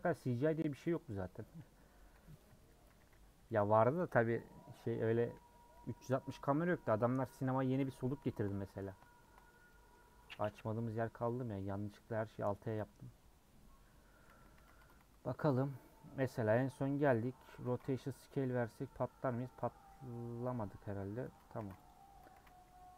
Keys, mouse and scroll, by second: 0.5 scroll down 1, 0.9 click, 1.0 /, 1.5 Tab, 2.8 a, 4.1 u, 5.3 /, 5.8 Tab, 6.4 click, 6.5 scroll down 2, 6.8 middle click, 7.9 middle click, 8.6 scroll up 2, 9.0 shift+middle click, 9.5-10.4 scroll down 2, 9.7 middle click, 10.4 middle click, 11.2 click, 11.6 middle click, 12.2 scroll up 3, 12.6-14.5 middle drag, 14.5 a, 14.8 Tab, 15.0 a, 15.4 Tab, 16.0 scroll down 1, 16.2 middle click, 16.6 Tab, 17.0 Tab, 18.1 ctrl+a, 18.6 middle click, 19.0 scroll up 1, 19.3 scroll down 1, 19.6-21.9 middle drag, 21.9 ctrl+a, 22.1 Tab.